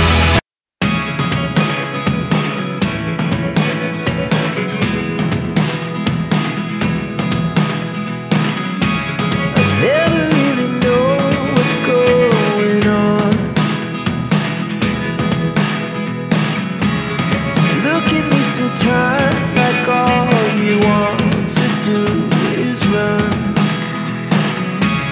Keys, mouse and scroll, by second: 2.0 click, 2.2 scroll up 1, 3.7-4.1 scroll down 1, 4.7 click, 4.9 double click, 6.6 ctrl+g, 7.7 click, 8.5 click, 9.1 click, 9.9 click, 10.5 click, 11.3 click, 12.0 click, 13.7 click, 14.9 click, 15.9 click, 16.6 click, 17.8 click, 18.3 click, 19.0 click, 19.6 click, 22.2 click, 22.6 2, 23.6 click.